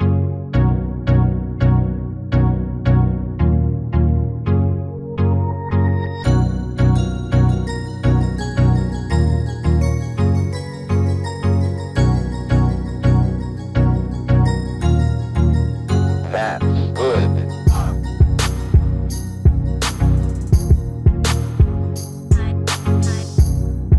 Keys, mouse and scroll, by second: 0.5 right click, 1.2-2.3 drag, 2.8 r, 3.2 a, 3.4 r, 5.0-6.3 middle drag, 6.3 right click, 7.2 right click, 8.1 ctrl+l, 8.9-10.0 drag, 9.7-10.7 middle drag, 10.4 right click, 11.1 ctrl+l, 11.5 click, 12.1 middle click, 12.3 middle click, 13.4-15.3 right drag, 15.3 ctrl+l, 15.9-16.9 drag, 16.5-17.5 middle drag, 17.8-19.2 middle drag, 19.2 right click, 20.1 click, 20.9 ctrl+l, 21.6 click, 22.3-23.9 middle drag.